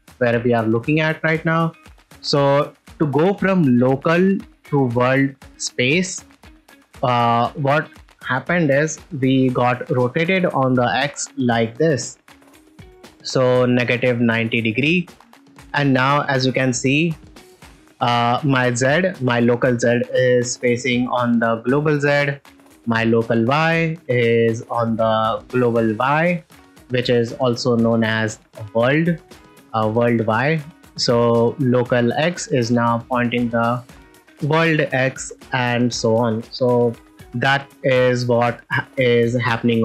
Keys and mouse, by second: 0.6-1.7 middle drag, 2.1 ctrl+middle click, 6.6 middle click, 6.8 shift+middle drag, 9.6 r, 9.6 x, 14.5 ctrl+click, 15.1 shift+middle click, 15.6 middle drag, 15.9 ctrl+middle click, 16.3 middle click, 17.0 middle click, 26.5-26.8 middle drag, 35.5 ctrl+middle click, 35.8 middle click, 37.1 alt+shift+r, 37.1 shift+middle click, 37.8 click, 38.4 shift+middle click, 38.8 ctrl+middle drag, 39.3 shift+middle click, 39.7-39.8 ctrl+middle drag.